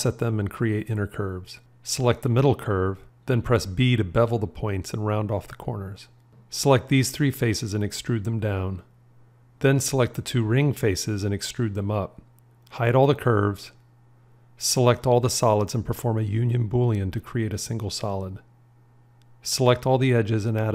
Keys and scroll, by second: 3.0 b, 13.8 h, 16.4 q.